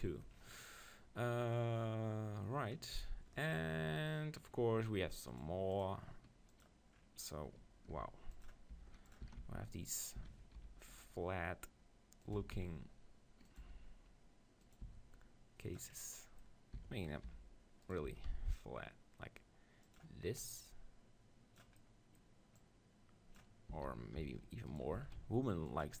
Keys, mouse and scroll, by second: 0.7-5.9 middle drag, 3.9 KP_3, 5.9-7.2 drag, 7.9 g, 8.7 g, 9.1-11.0 drag, 9.3 s, 10.2-11.8 right drag, 10.2 s, 12.4-14.3 drag, 12.4 s, 13.6 g, 14.8-16.0 drag, 14.9 s, 16.0-17.8 middle drag, 16.8 s, 17.0 click, 18.1 s, 20.0-22.4 drag, 21.8-23.7 middle drag, 23.4-24.5 drag, 23.7 s, 24.8-26.0 right drag, 25.0 s.